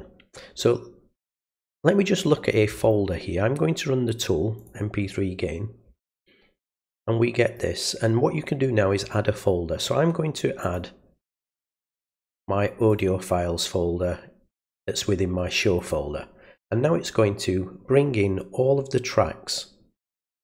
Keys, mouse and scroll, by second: 1.4 click, 4.6 click, 6.7 click, 10.6 click, 12.9 click, 15.8 click.